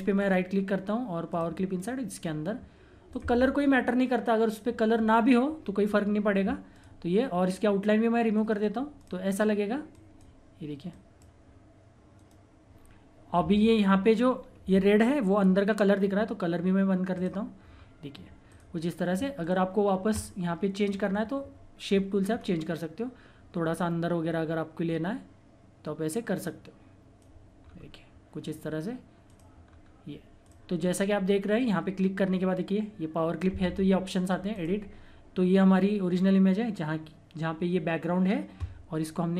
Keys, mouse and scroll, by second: 0.2 right click, 1.3 click, 6.7 click, 8.4 right click, 8.9 click, 12.2 right click, 14.3 scroll up 1, 15.4-16.5 scroll down 1, 17.1 click, 17.7-18.5 scroll down 1, 18.5 click, 22.3-22.6 scroll up 1, 24.2-24.7 scroll down 1, 24.9-26.4 scroll up 1, 26.4 click, 27.6 scroll down 1, 29.3 click, 29.6 scroll down 1, 30.5 click, 30.8-31.1 scroll up 1, 31.6 click, 34.5 click, 34.5 click, 35.8 scroll, 35.9-37.7 scroll up 1.